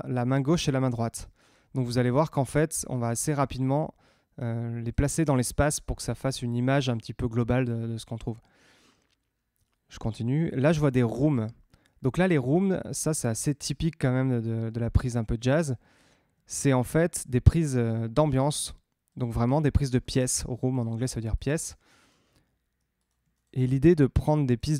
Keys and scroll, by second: 7.4 Tab.